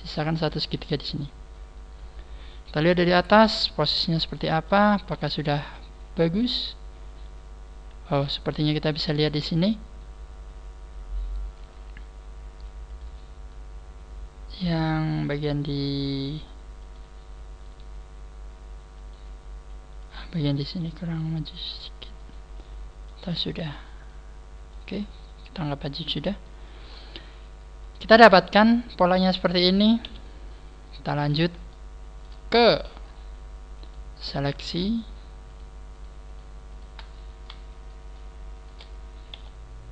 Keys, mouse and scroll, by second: 0.2 shift+right click, 0.6 f, 2.7 KP_7, 3.4 scroll down 3, 3.7-4.3 scroll up 1, 4.3 shift+middle click, 4.3 scroll up 1, 6.7 scroll up 1, 11.6 right click, 15.1 right click, 17.6 g, 19.0 right click, 20.8 g, 22.2 right click, 22.5 scroll up 1, 23.0 middle click, 23.2-23.8 scroll down 5, 23.6 middle click, 24.9 scroll down 2, 25.2 middle click, 26.8 scroll up 3, 27.8 scroll up 2, 28.0 middle click, 30.0 KP_1, 30.5-30.9 scroll down 1, 31.6 shift+middle click, 32.4 scroll down 3, 33.0 scroll up 1, 33.5 scroll up 1, 33.5 KP_1, 33.8 right click, 33.8 scroll down 1, 34.7 shift+right click, 35.4 shift+right click, 35.9 shift+right click, 37.0 shift+right click, 37.0 middle click, 37.8 shift+middle click, 38.5 shift+right click, 39.3 KP_3.